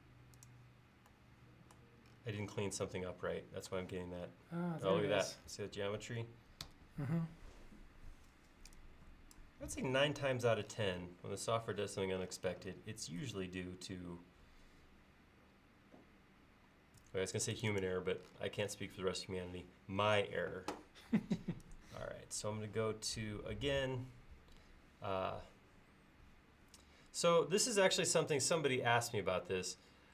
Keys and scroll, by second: 6.7 Escape, 8.4 e, 17.1 space.